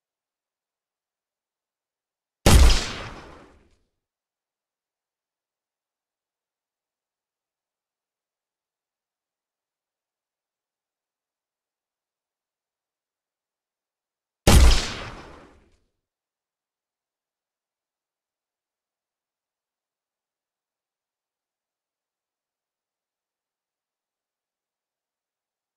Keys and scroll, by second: 12.5 a, 24.6 Escape.